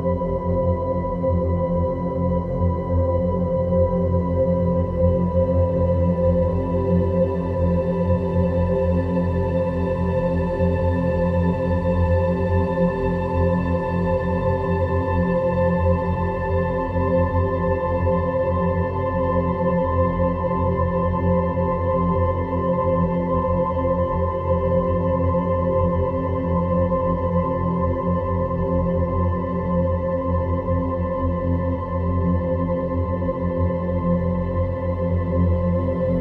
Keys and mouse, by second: 0.1 click, 4.8 click, 6.1 Tab, 7.4 middle click, 8.7 e, 12.5 click, 16.3 Tab, 16.9-19.8 middle drag, 22.3 click, 26.0-27.2 drag, 28.4-29.0 drag, 30.4 click, 32.9 Delete.